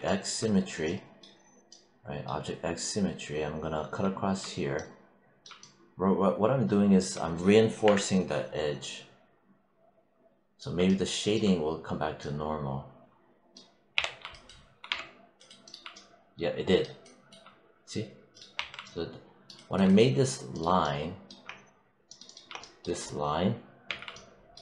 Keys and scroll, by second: 7.7 BackSpace, 13.8 w, 14.7 3, 18.4 1, 23.7 q.